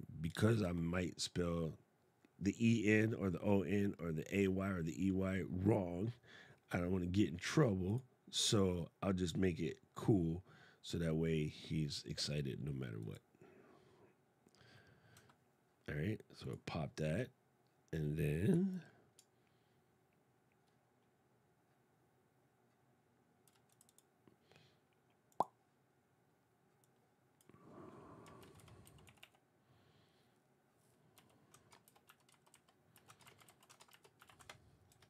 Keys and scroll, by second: 0.3 super+space, 28.1 shift+s, 31.6 shift+s, 33.0 shift+t, 33.6 shift+d.